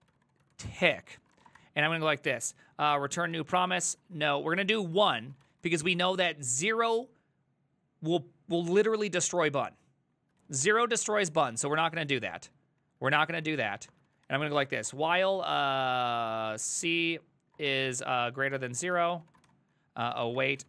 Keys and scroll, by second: 0.0-2.1 typing, 3.4 Tab, 3.5-6.3 typing, 10.4 ctrl+c, 10.6 ctrl+c, 10.7 ctrl+c, 10.9 ctrl+c, 10.9-20.6 typing.